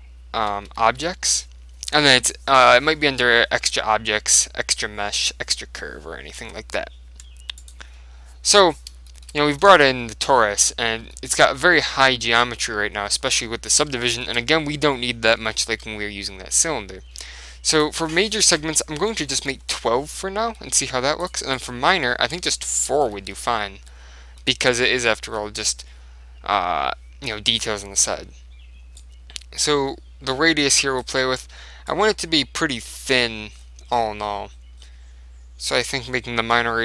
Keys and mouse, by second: 9.2-17.8 middle drag, 17.8 click, 20.2-21.9 middle drag, 21.3 click, 23.4-26.9 middle drag, 27.5-29.1 middle drag, 29.1 click, 30.9 middle click, 32.0 click, 33.7-36.0 middle drag, 36.0 click.